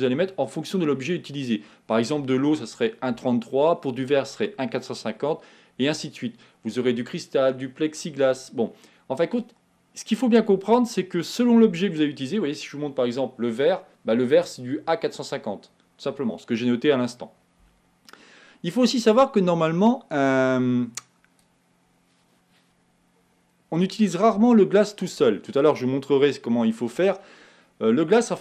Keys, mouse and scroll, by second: 19.4 click.